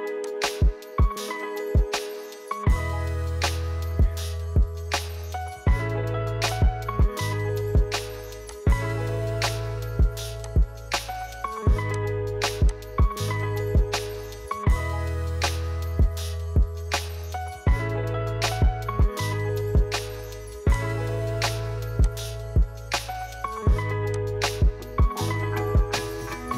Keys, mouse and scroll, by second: 0.4 click, 0.6-1.4 scroll down 5, 1.4-3.0 middle drag, 3.0-3.6 scroll up 1, 3.6-4.7 middle drag, 4.7-7.4 scroll up 1, 7.4-8.4 scroll up 1, 8.4 click, 12.8 click, 15.4-26.5 drag.